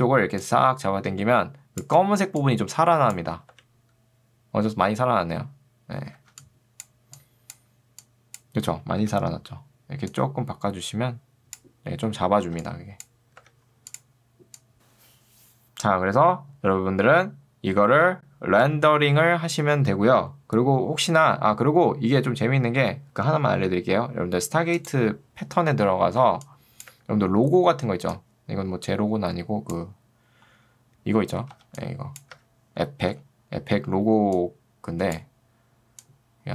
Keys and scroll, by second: 2.1 ctrl+2, 3.5 Escape, 6.1 ctrl+2, 9.1 Escape, 12.5 ctrl+2, 13.5 Escape, 26.4 ctrl+2, 27.0 Escape, 31.6 ctrl+2, 32.4 Escape, 33.2 s.